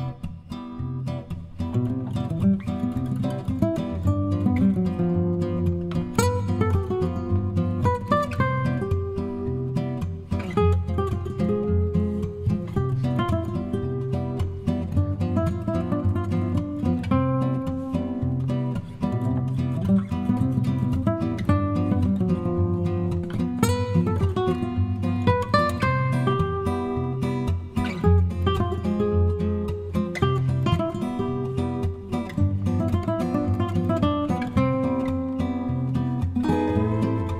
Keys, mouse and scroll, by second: 0.5 F1, 1.6 click, 2.5 click, 5.1 shift+click, 7.9 shift+click, 8.4 shift+click, 8.8 shift+click, 9.3 shift+click, 9.7 shift+click, 11.6 shift+click, 12.0 shift+click, 12.4 shift+click, 12.8 shift+click, 13.2 shift+click, 14.7 shift+click, 15.1 shift+click, 16.3 shift+click, 18.2 KP_Subtract, 19.5 click, 20.7 click, 21.1 click, 21.6 click, 23.5 middle click, 24.8 click, 25.2 middle click, 25.9 middle click, 26.7 click, 28.4 click, 29.2 click, 30.3 click, 32.9 click, 34.9 click, 37.1 click.